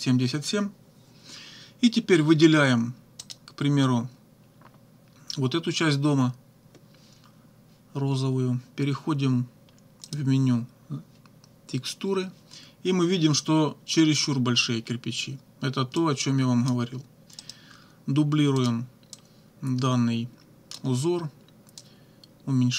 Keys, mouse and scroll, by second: 3.2 click, 10.1 click, 16.0 click, 17.4 right click, 18.6 click, 19.1-20.9 drag, 21.8-22.7 drag.